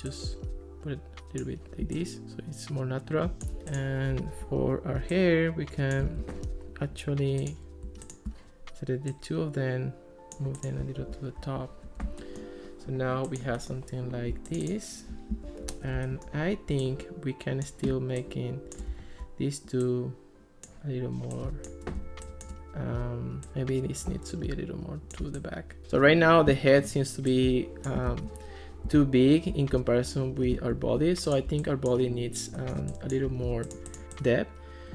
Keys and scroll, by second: 6.3 super+z, 11.0 alt+r, 15.4 alt+r, 26.5 ctrl+s, 28.2 ctrl+x, 28.9 ctrl+s.